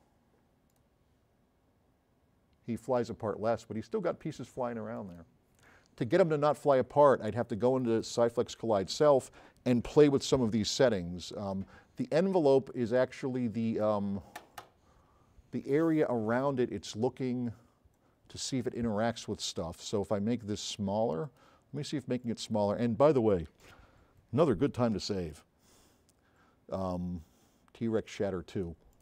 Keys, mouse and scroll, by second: 0.7 click, 21.2 click, 22.2 click, 27.3 middle click.